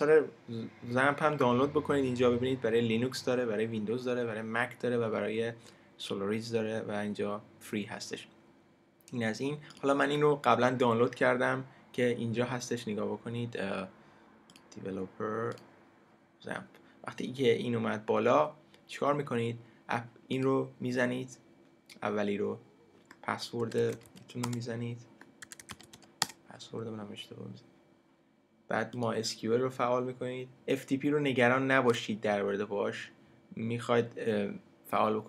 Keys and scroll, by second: 24.4 Return, 26.2 Return.